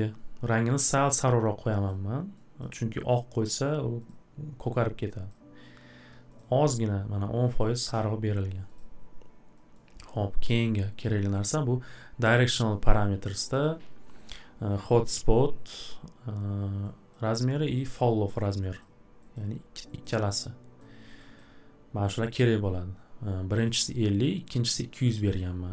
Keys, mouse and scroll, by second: 1.9 click, 2.6 click, 4.1 click, 5.3 click, 6.4 click, 7.6 click, 9.7 click, 17.1 click, 18.8 click, 19.3 click, 20.0 click, 20.8 click, 21.4 click, 23.6 click, 24.6 click, 25.4 click.